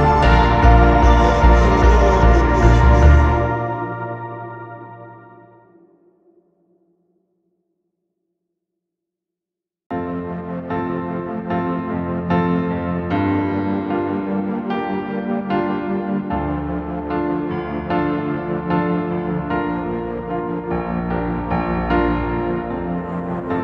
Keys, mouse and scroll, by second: 3.0 scroll down 1, 3.1-3.5 typing, 3.6 middle click, 5.0 scroll up 1, 7.6 Return, 9.2 typing, 11.7 space, 12.2 right click, 14.1 typing, 14.4-15.5 scroll down 1, 15.5 middle click, 15.9 scroll down 1, 16.1 space, 17.0 double click, 18.2 typing, 20.2 double click, 20.4 Delete, 21.0 double click, 21.3 Delete, 21.6 double click, 22.8 typing.